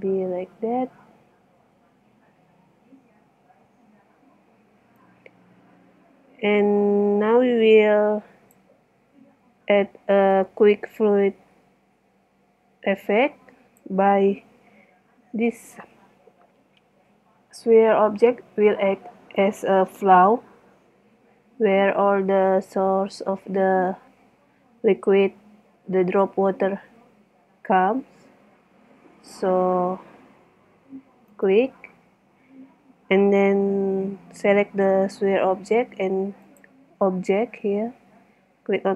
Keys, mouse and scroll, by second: 0.4 KP_1, 1.6 z.